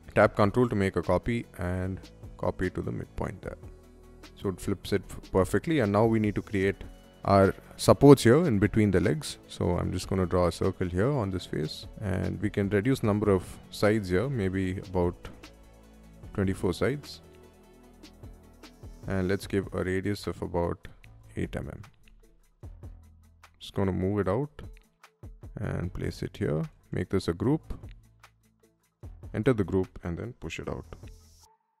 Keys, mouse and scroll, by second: 2.8-4.3 middle drag, 4.5 space, 4.7 click, 5.1-6.5 shift+middle drag, 7.3-7.8 middle drag, 8.8 shift+middle click, 9.6 c, 10.6 click, 13.6-15.5 typing, 16.0 Return, 17.0 middle click, 21.0 8, 21.2 Return, 21.7 space, 22.6 click, 22.6 m, 23.4 scroll down 1, 24.3-25.1 scroll up 2, 25.8 click, 26.3 space, 26.5 right click, 27.6 click, 28.1 click, 28.3 click, 29.0 o, 29.3 click, 30.8-31.8 typing, 31.4 middle click.